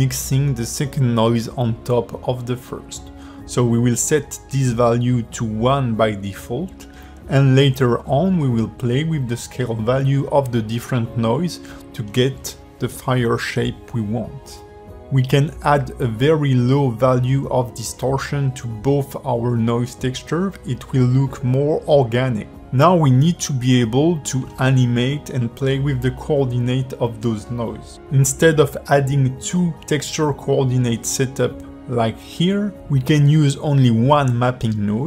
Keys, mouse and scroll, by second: 5.1 click, 8.9 click, 12.8-13.3 scroll up 1, 13.6 click, 16.7 click, 18.7-19.4 scroll up 4, 19.4-19.7 scroll down 1, 20.1-21.5 scroll down 1, 21.5-21.9 scroll down 3, 22.1 click, 23.6 shift+middle click, 24.6 click, 25.2 shift+click, 26.4 ctrl+t, 29.5 g, 30.7 click, 31.9 click, 33.3 click, 34.2 x, 34.8 click.